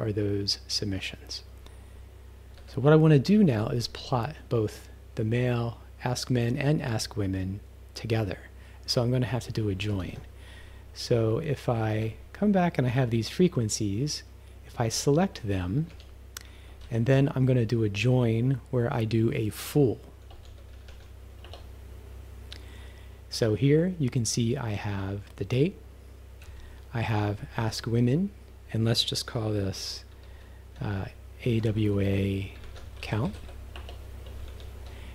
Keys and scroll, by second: 2.6 q, 9.9 shift+s, 11.8 shift+-, 12.9 Up, 15.0 s, 15.5 Down, 15.9 s, 16.9 shift+&, 20.2-21.3 typing, 21.5 Return, 26.4 Right, 27.6 shift+-, 30.3-34.5 typing.